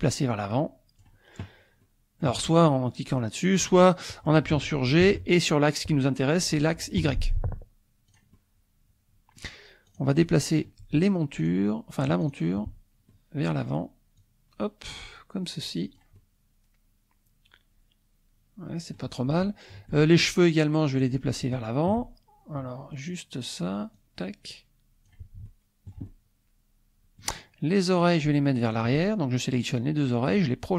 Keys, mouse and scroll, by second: 1.8 middle click, 3.8 middle click, 5.1 g, 7.0 y, 8.1 click, 8.3-9.6 middle drag, 10.0 click, 10.2 middle click, 10.3 click, 11.4 shift+click, 12.4 shift+click, 13.1 shift+middle click, 14.2-16.2 drag, 16.2-19.1 middle drag, 19.4 shift+middle click, 20.2 shift+click, 21.0 click, 21.6 shift+middle click, 24.0-25.3 drag, 25.5-27.4 shift+middle drag, 28.1 click, 28.7 shift+click, 29.6 middle click.